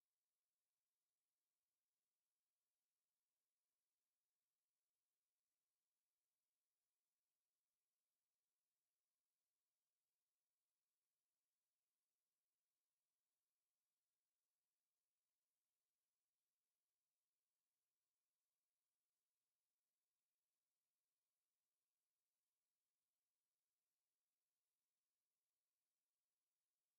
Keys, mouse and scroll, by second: 4.3 scroll down 1, 8.9 scroll up 1.